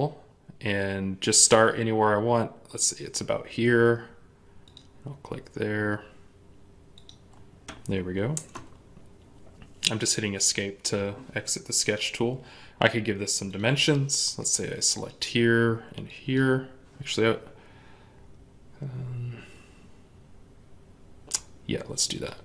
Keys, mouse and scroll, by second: 8.2 Escape.